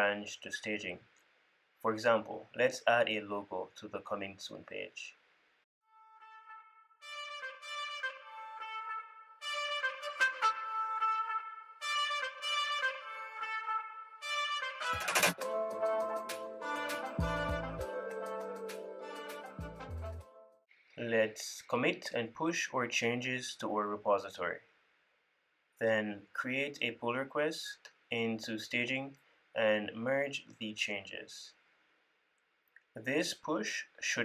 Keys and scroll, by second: 11.2 super+s, 11.6 super+s, 13.2 ctrl+super+f, 13.5 super+b, 17.4 ctrl+super+f, 17.5 super+w, 18.3 super+b, 20.1 ctrl+`, 25.0 super+c, 25.3 super+v.